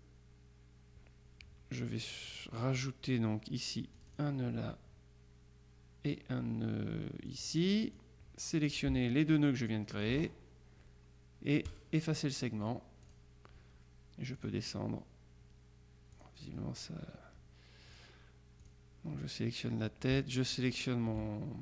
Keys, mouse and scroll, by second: 4.1 click, 7.4 click, 9.5-10.6 shift+drag, 11.7 click, 13.1 click, 14.4 click, 16.2 click, 18.0 click, 18.7 click, 20.7 shift+click.